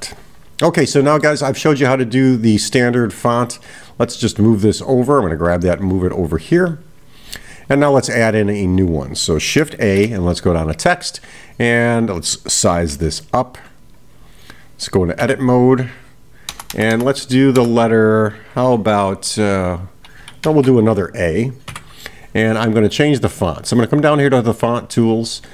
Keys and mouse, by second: 0.8-1.4 middle drag, 2.6-3.3 drag, 5.0-6.3 drag.